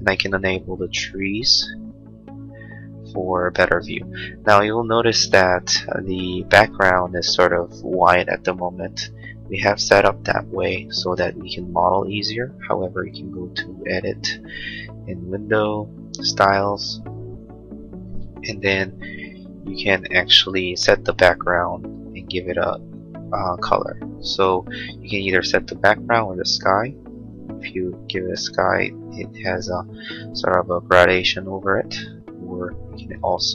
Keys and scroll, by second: 5.3 space.